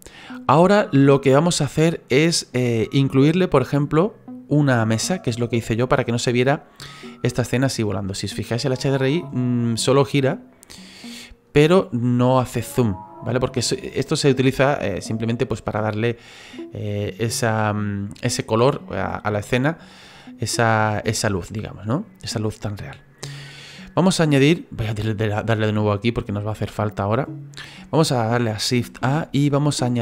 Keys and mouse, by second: 8.8 middle click, 18.3 middle click, 21.8 middle click, 27.2 click.